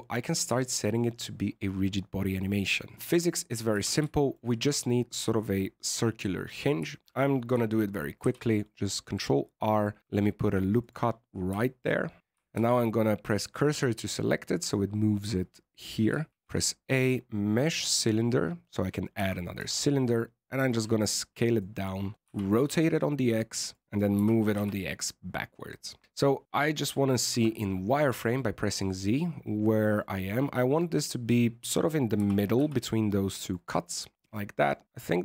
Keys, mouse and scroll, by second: 0.5 shift+middle click, 2.9-3.7 scroll up 4, 2.9 shift+middle click, 3.7 Tab, 4.1 shift+middle click, 6.8 shift+middle click, 8.1 ctrl+r, 11.1-11.6 scroll up 8, 11.6 shift+middle click, 12.1 Tab, 12.5 shift+s, 16.3 shift+a, 19.1 s, 22.6 ctrl+r, 24.1 g, 26.0 middle click, 27.3 z, 27.4 middle click, 28.7 middle click, 32.1 g, 33.8 middle click, 34.9 middle click.